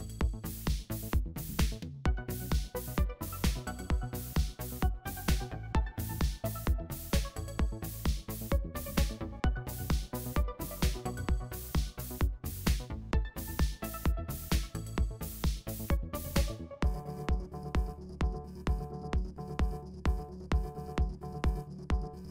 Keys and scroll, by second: 0.3 super+z, 3.0 super+z, 4.5 shift+super+a, 10.1 super+0, 10.6 v, 11.2 shift+super+g, 11.3 shift+super+g, 15.2 super+y, 15.3 super+y, 17.4-20.0 typing, 18.2 shift+super+[, 20.6 shift+super+g.